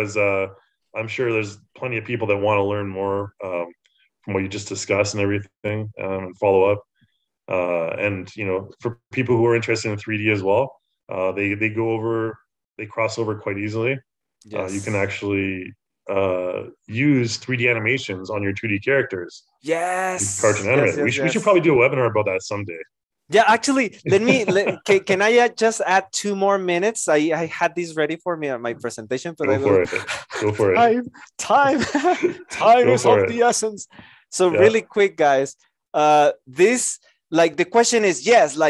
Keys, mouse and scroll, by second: 37.1 Return.